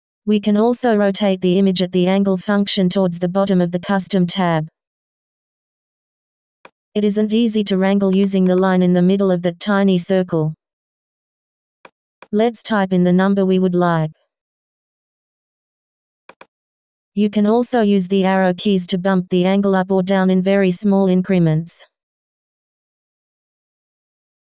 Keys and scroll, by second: 9.3 Down, 12.5 3, 13.7 Return, 17.1 Down, 21.1 Down.